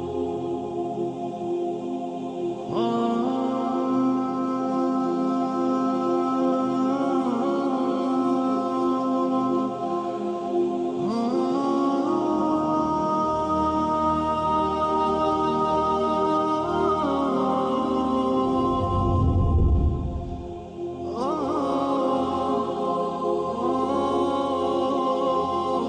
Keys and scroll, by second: 0.4 ctrl+g, 13.6 ctrl+z, 22.7 ctrl+alt+c, 22.9 b, 23.3 Down, 23.4 Down, 23.5 Down, 23.8 Down, 24.1 Down, 24.8-25.3 typing.